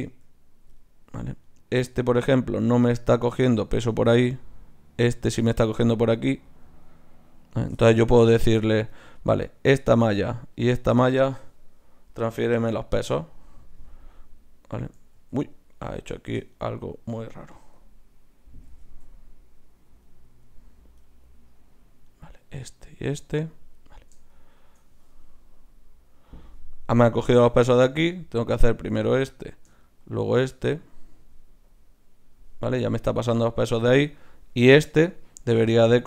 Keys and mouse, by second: 0.0 Tab, 0.8 click, 1.5-6.0 drag, 12.7 click, 14.2 click, 15.3 ctrl+z, 17.9 ctrl+z, 18.5 click, 18.9 ctrl+z, 21.0-22.1 right drag, 27.7 ctrl+z, 31.7-34.1 drag.